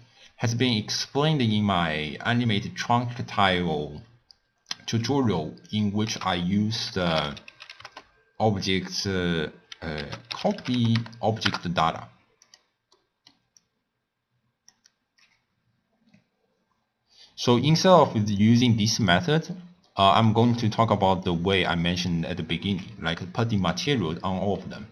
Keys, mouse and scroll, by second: 0.6 click, 5.7 click, 6.0 ctrl+a, 13.0 middle click, 13.6-16.6 drag, 17.6 middle click, 18.4-19.5 drag, 19.5-20.1 scroll down 4, 20.1-20.5 middle drag, 20.5-21.2 scroll up 3, 21.2 click, 22.0 click, 23.2 x, 23.2 click, 24.6-24.9 middle drag.